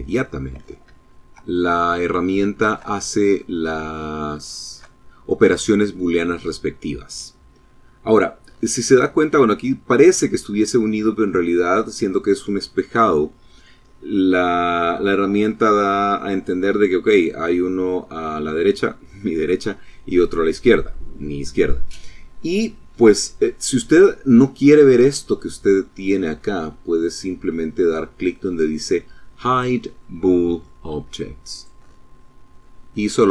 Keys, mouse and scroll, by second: 0.3 shift+middle click, 0.8 shift+middle click, 1.0 shift+click, 1.7 shift+middle click, 2.2 click, 2.9 shift+middle click, 3.0 shift+click, 3.6-6.1 shift+middle drag, 30.4 click, 31.7-32.2 scroll down 2, 32.2-33.3 drag.